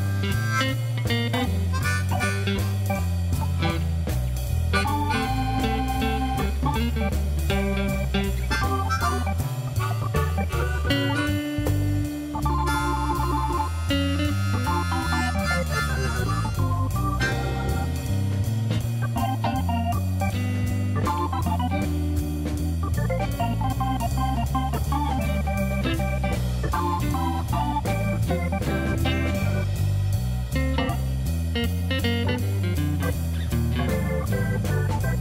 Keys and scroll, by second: 0.2 Tab, 5.4 ., 10.0-11.3 typing, 11.7 Return, 15.1-16.3 typing, 16.5 Return, 17.4 1, 17.6 Return, 20.6 g, 20.8 z, 23.6 Tab, 24.1 alt+a.